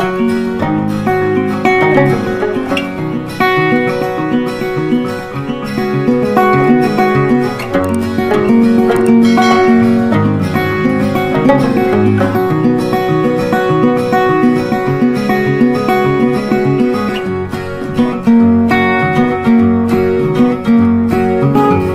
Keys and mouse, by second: 1.4 right click, 4.7 click, 9.2 click, 10.3 Up, 12.8 right click, 14.1 click, 19.7 shift+Page_Down.